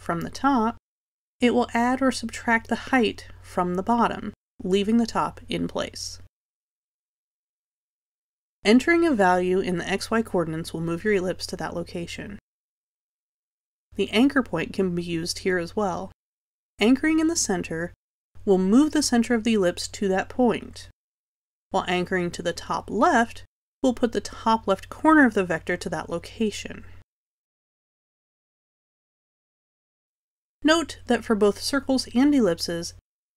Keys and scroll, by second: 10.7 0, 13.7 0, 17.5 0, 25.3 0, 28.0 0.